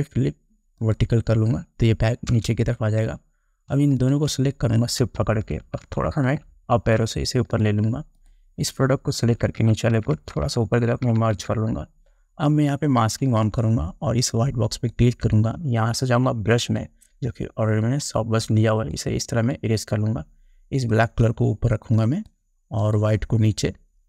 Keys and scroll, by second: 2.5 Return, 6.0 shift+Up, 9.4 Up.